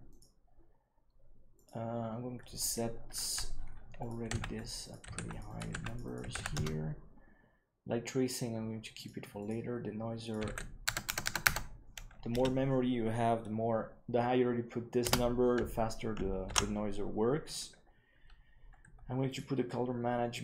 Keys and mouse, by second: 1.5-2.6 drag, 3.9 click, 4.8 click, 5.5 click, 6.0 click, 8.9 click, 9.3 click, 10.3-15.1 drag, 11.0 KP_0, 11.4 KP_0, 16.6 ctrl+s.